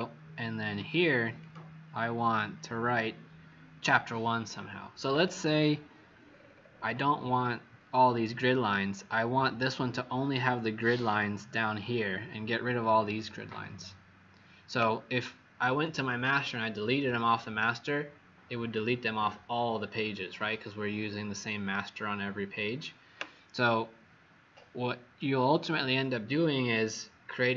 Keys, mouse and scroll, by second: 6.2-7.1 scroll down 7, 7.1-7.8 scroll down 4, 8.1-8.9 scroll up 8, 9.2 scroll up 2.